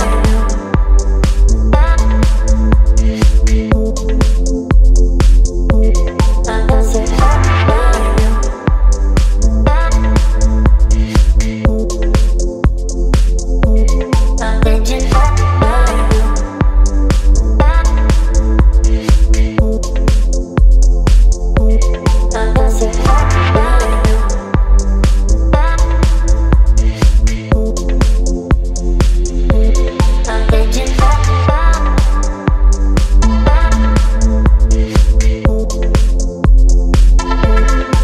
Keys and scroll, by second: 1.6 space, 3.7 t, 7.6-11.5 typing, 12.1 ctrl+a, 19.6 v, 27.1 space, 30.6 t.